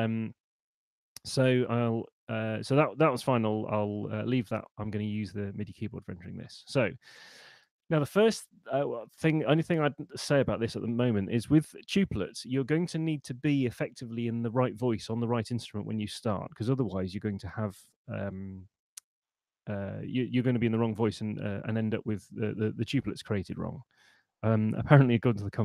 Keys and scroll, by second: 7.0 Up.